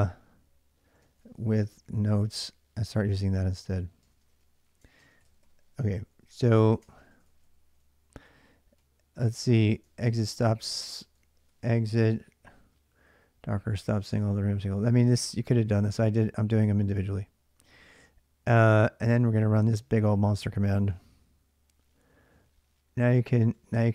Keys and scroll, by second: 0.0-11.4 typing, 6.6 ctrl+[, 9.7 ctrl+[, 12.9 j, 13.8 j, 14.9-15.7 typing, 19.1-23.9 typing.